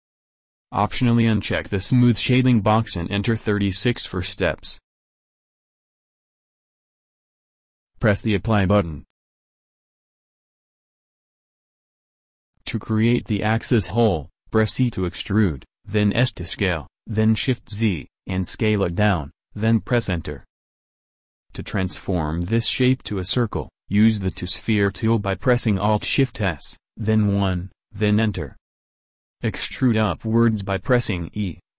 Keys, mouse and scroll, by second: 1.2 click, 1.8-4.1 middle drag, 4.1 click, 6.7 Tab, 7.5 Tab, 9.5 Tab, 15.0 e, 25.7 alt+shift+s, 27.9 click, 28.9 e.